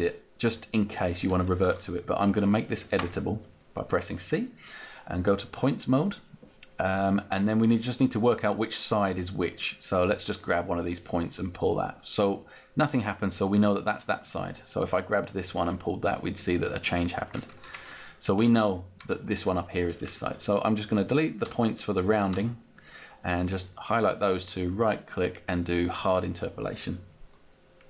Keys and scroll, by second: 3.0 c, 3.7 c, 17.7 ctrl+z, 21.6 Delete.